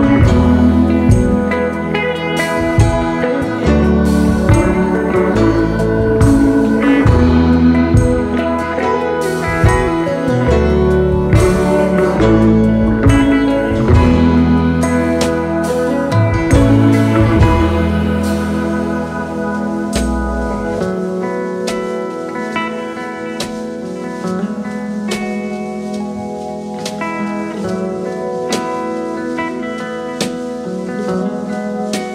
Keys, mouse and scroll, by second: 1.5 Return, 2.8 space, 2.9 double click, 4.5 shift+click, 12.4 alt+scroll up 3, 13.9 alt+scroll down 3, 14.7 space, 15.2 space, 18.6 alt+scroll down 1, 18.8 space, 20.0 shift+click, 23.9 double click, 25.1-29.6 typing, 27.0 alt+scroll up 1, 28.9 alt+scroll up 1.